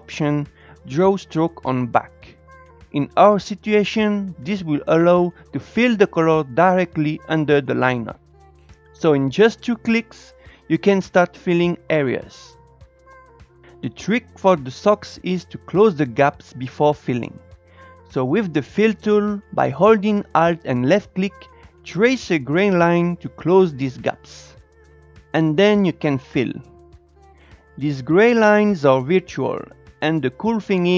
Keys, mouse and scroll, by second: 7.9-10.8 drag, 11.5 click, 15.1 click, 15.2-16.2 scroll up 1, 17.2 alt+click, 19.0-26.7 alt+drag, 27.2-29.2 scroll down 4, 29.2 scroll down 1.